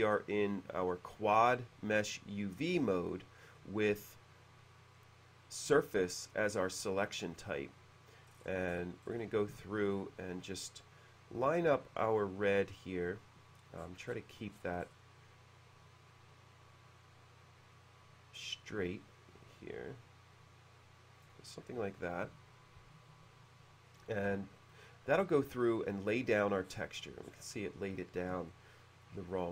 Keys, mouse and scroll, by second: 3.6 click, 8.3-9.0 scroll up 1, 9.6 b, 13.8-14.4 scroll down 1, 14.6-15.3 scroll up 1, 21.3 click, 26.2 middle click, 26.4-26.8 scroll down 1, 26.8-27.9 middle drag, 28.5 shift+middle click.